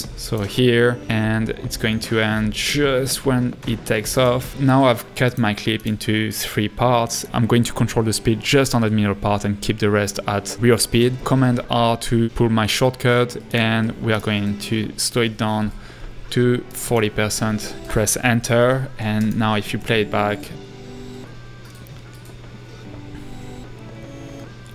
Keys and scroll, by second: 4.5 a, 11.0 super+r, 16.3-17.0 typing, 17.6 Return, 19.8 space.